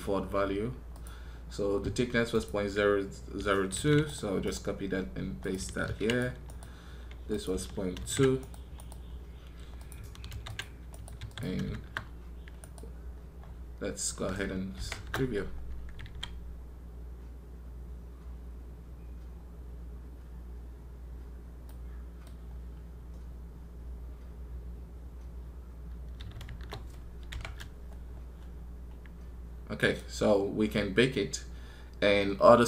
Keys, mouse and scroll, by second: 4.3 right click, 6.3 right click, 8.6 right click, 10.7 right click, 12.4 right click, 29.6 right click.